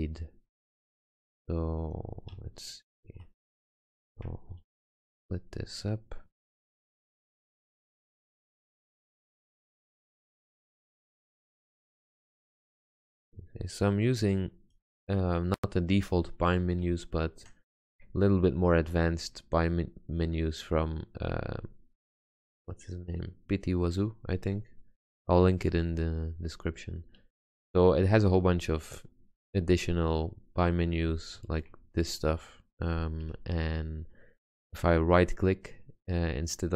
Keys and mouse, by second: 2.5 Tab, 4.8 ctrl+r, 6.6 Tab, 10.0 ctrl+space, 12.0 x, 19.2 middle click, 24.6-28.2 middle drag, 31.5 shift+z, 34.7-35.0 middle drag.